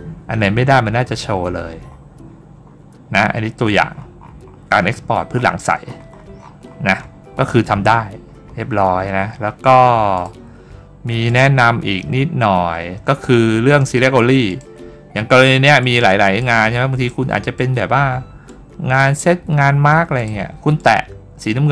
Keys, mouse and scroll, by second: 1.7 scroll down 2, 2.5-3.0 scroll up 2, 3.8-4.5 scroll up 2, 4.9-6.6 scroll up 10, 8.0 scroll up 1, 10.0 click, 11.1 click, 12.4 middle click, 12.4-12.7 scroll down 1, 14.3 click, 15.7-16.2 drag, 16.9 click, 18.3 click, 20.0 click, 20.6 click.